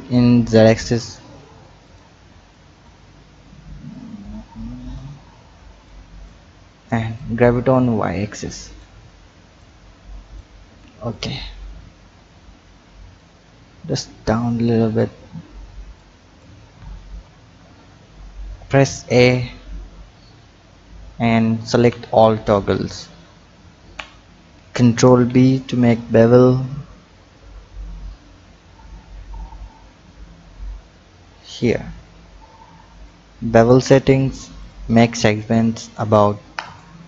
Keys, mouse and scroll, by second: 0.1 e, 2.5 click, 3.9-5.9 drag, 7.1-9.6 drag, 11.1 click, 13.2 click, 15.1 Tab, 16.0 click, 16.6 Tab, 17.2-20.1 typing, 24.9 ctrl+b, 32.9 click, 34.6-36.7 drag.